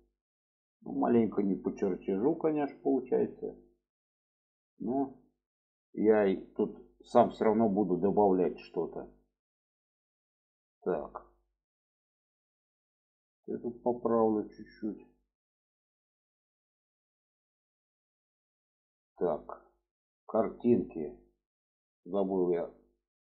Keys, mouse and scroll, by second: 1.2 click, 2.1-3.3 drag, 3.9 click, 4.7 click, 5.7 click, 6.4 alt+z, 7.0-8.8 middle drag, 9.1-11.0 middle drag, 11.3 shift+middle click, 12.3 click, 13.1-14.4 drag, 14.9 click, 15.7-18.0 middle drag, 18.3 middle click, 23.0 click.